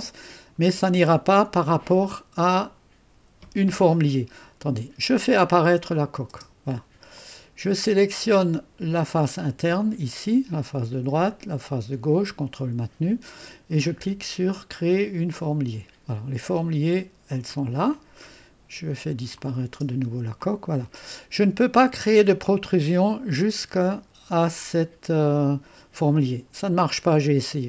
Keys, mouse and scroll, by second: 4.1-4.9 scroll up 1, 4.9-5.9 scroll up 1, 5.9 click, 6.3 space, 7.1 click, 7.8 click, 9.2 click, 9.8-11.2 drag, 12.0 click, 15.3 click, 17.3-19.0 drag, 19.4 click, 19.7 space, 20.4-22.4 drag, 26.1-27.6 drag.